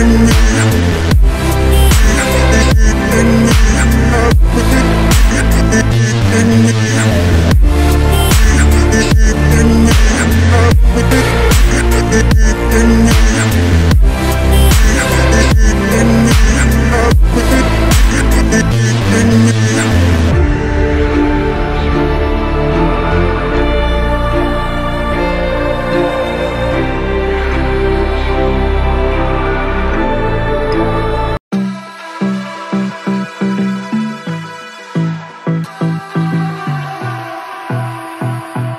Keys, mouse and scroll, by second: 0.5 right click, 9.0 ctrl+t, 12.7 Right, 12.8-14.7 typing, 18.6 ctrl+z, 22.1 double click, 23.7 double click, 24.1-24.9 typing, 25.7 shift+click, 29.9 ctrl+t, 33.0 ctrl+t, 33.1 double click, 34.7 ctrl+t, 36.0 ctrl+t, 36.7 ctrl+t, 38.2 ctrl+t.